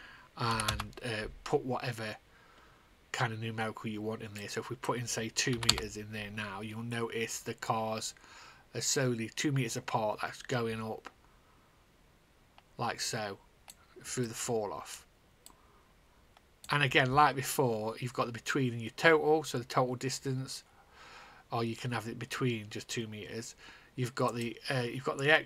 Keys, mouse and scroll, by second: 0.4 5, 1.3 Return, 4.9 click, 5.4 KP_2, 6.3 Return, 7.2 click, 14.8 click, 24.8 click.